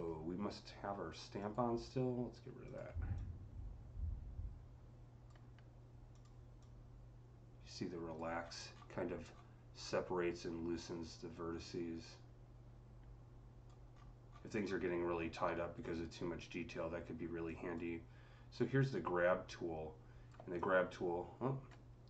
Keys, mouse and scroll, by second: 2.7 click, 3.0-6.4 drag, 6.4-8.3 drag, 8.2-8.6 scroll up 7, 9.2 scroll down 4, 9.6-13.8 drag, 13.8-14.1 scroll up 4, 14.2 scroll, 14.6 scroll down 1, 17.3 click, 17.3 scroll down 1, 18.4-22.0 drag.